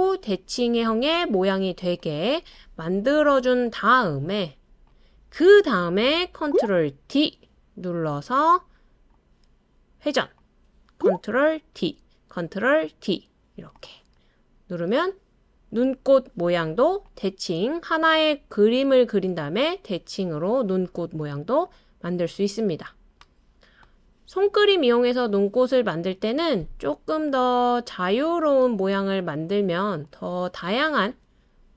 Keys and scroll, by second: 6.5 ctrl+d, 7.1 super+d, 11.8 super+d, 12.9 super+d.